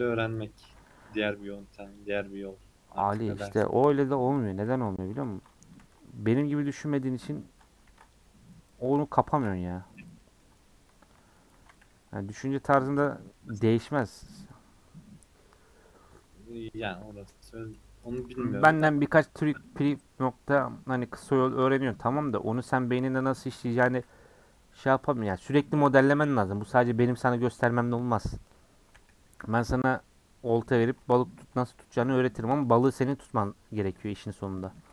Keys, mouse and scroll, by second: 0.7 a, 2.0 u, 3.5-4.6 middle drag, 4.6 ctrl+z, 5.2 ctrl+z, 5.8 ctrl+z, 6.8-7.8 middle drag, 7.8 ctrl+r, 8.8 middle click, 9.3 ctrl+r, 10.2 middle click, 11.1 alt+click, 11.6 a, 12.5 u, 13.4 middle click, 23.6 middle click, 28.9 /, 29.4 /, 29.6-30.4 scroll down 5, 30.4 middle click, 30.7 Tab, 30.9-31.4 middle drag, 31.4 scroll down 1, 31.6 middle click, 32.0 h, 32.6 Left, 33.6 KP_Decimal, 34.0-34.4 middle drag, 34.4 scroll down 3, 34.6-34.9 middle drag.